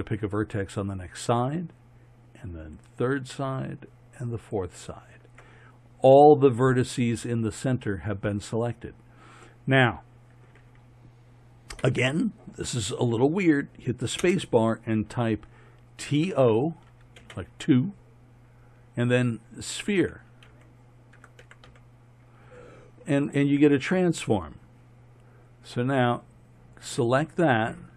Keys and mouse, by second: 14.2 space.